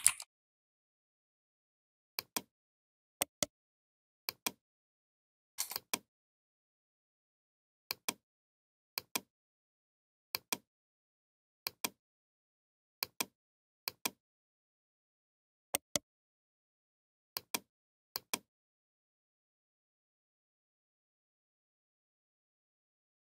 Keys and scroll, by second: 0.0-0.4 typing.